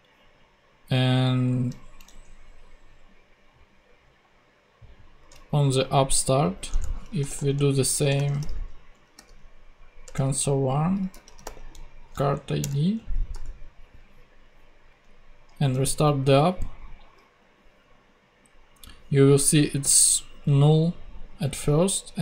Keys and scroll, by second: 2.0 ctrl+Tab, 5.2 ctrl+Tab, 6.7 Return, 7.0-9.2 typing, 10.0 Return, 11.0 c, 11.2 r, 12.6 Return, 12.9 super+Right, 13.3 super+;, 14.0 ;, 14.9 super+Tab, 15.7 ctrl+super+Tab, 16.2 ctrl+super+z.